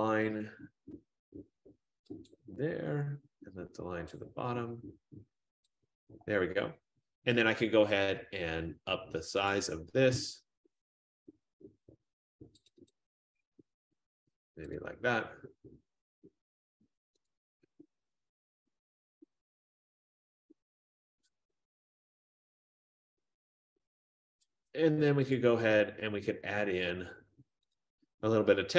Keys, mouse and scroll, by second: 2.4 click, 4.2 click, 5.8 click, 9.6 click, 12.8 click, 13.0 click, 14.9 click, 17.3 click, 19.4 Left, 19.9 Left, 20.6 Up, 20.6 Right, 20.6-22.4 drag, 25.5 Up, 25.5-26.8 drag, 28.0 click, 28.6 Down.